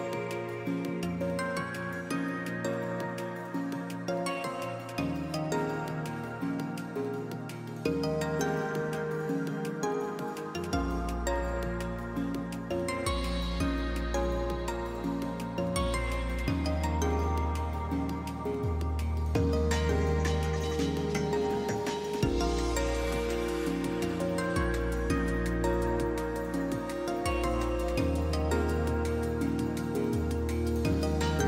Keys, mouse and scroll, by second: 5.9 shift+s, 6.5 shift+s, 8.5 shift+s, 8.8 shift+s, 13.0 shift+s, 13.4 shift+s, 13.6 shift+s, 19.2 shift+s, 19.4 shift+s, 25.6-27.9 typing, 29.9 shift+s, 30.4 shift+s.